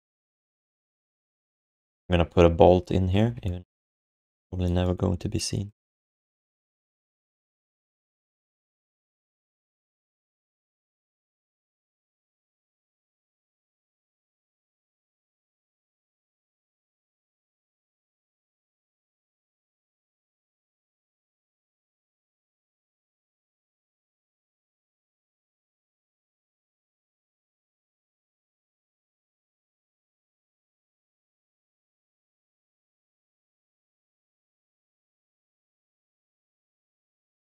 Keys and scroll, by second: 3.1 5, 11.8 3, 13.5 alt+d, 14.3 1, 21.0 q, 23.5 alt+shift+d, 23.7 ctrl+s, 26.5 3, 27.1 1, 28.9 q, 31.8 z.